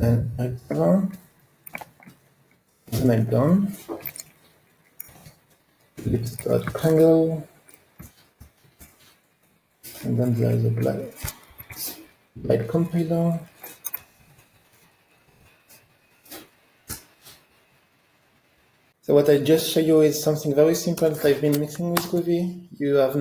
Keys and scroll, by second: 0.7 Tab, 9.0 Return, 11.6 Escape, 13.0 alt+Up, 16.9 Return, 23.1 ctrl+space.